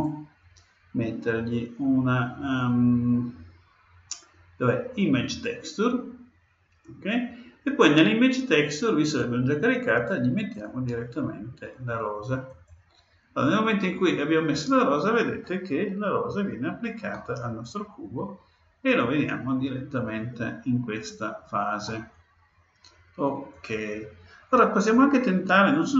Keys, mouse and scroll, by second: 10.5-12.3 drag, 17.0-18.9 middle drag, 23.5-25.4 drag.